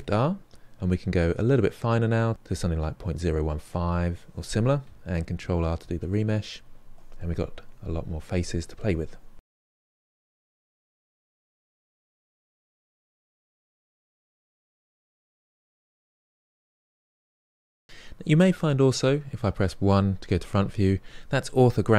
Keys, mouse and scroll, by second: 5.3 ctrl+r, 6.1 ctrl+middle click, 6.8 shift+click, 7.5 middle click, 7.8 f, 8.0 shift+middle click, 8.1 shift+click, 8.4 middle click, 8.6 shift+click, 9.0 middle click, 9.6 f, 9.9 click, 10.4 f, 10.5 click, 10.7 middle click, 10.8 ctrl+click, 11.0 middle click, 11.3 ctrl+click, 11.6 middle click, 11.8 shift+click, 12.2 middle click, 12.3 shift+click, 12.6 middle click, 12.7 shift+click, 12.8 middle click, 13.1 ctrl+click, 13.2 middle click, 14.1 middle click, 14.8 click, 15.5 middle click, 15.7 shift+click, 16.1 ctrl+middle click, 16.3 shift+click, 16.4 middle click, 16.5 shift+click, 17.3 middle click, 17.5 shift+click, 17.7 ctrl+middle click, 18.0 shift+click, 18.1 middle click, 19.3 KP_1.